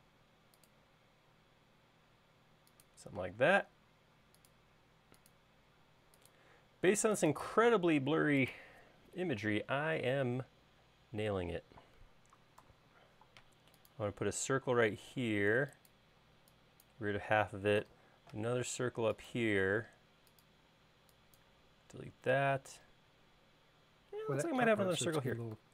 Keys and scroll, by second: 3.8 l, 13.2 c, 16.8 e, 18.3 c, 21.3 e.